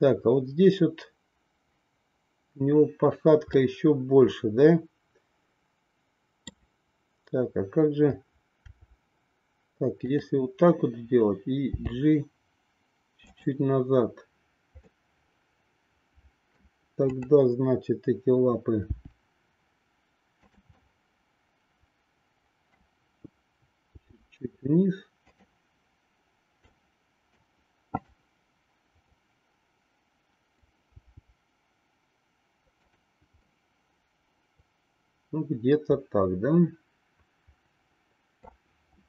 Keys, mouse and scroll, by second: 3.7-6.6 middle drag, 8.6 r, 11.6 g, 15.2-16.7 middle drag, 17.1-18.3 drag, 18.8 g, 20.7-22.7 middle drag, 23.9 g, 26.9 middle click, 28.0-29.2 drag, 29.3-30.6 middle drag, 31.0 g, 33.5 scroll up 1, 33.6-38.6 middle drag.